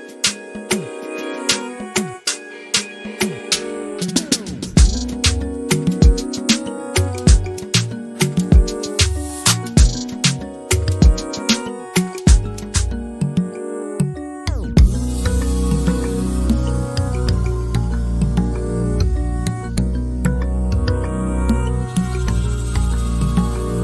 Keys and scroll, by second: 1.4 f, 3.4-4.3 typing, 5.4-6.2 typing, 7.6 Escape, 7.9 Escape, 9.0 f, 10.1-10.5 typing, 12.0 p, 14.9-15.2 typing, 17.4 ctrl+z, 17.9-20.5 typing.